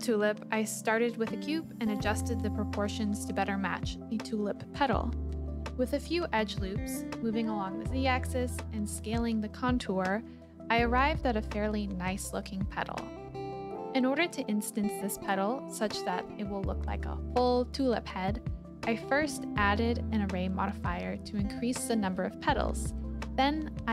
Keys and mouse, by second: 0.0 shift+middle click, 1.2 KP_7, 2.2 s, 2.6 y, 3.7 click, 4.4 KP_1, 5.4 s, 5.8 x, 6.6 click, 7.0 s, 7.3 click, 7.5 click, 7.9 s, 8.2 click, 9.4 ctrl+r, 10.0 click, 10.4 click, 10.6 s, 10.9 click, 11.2 click, 11.5 s, 12.1 click, 12.4 click, 12.5 KP_7, 13.0 click, 13.7-15.0 drag, 18.7 click, 19.1 click, 20.8 click.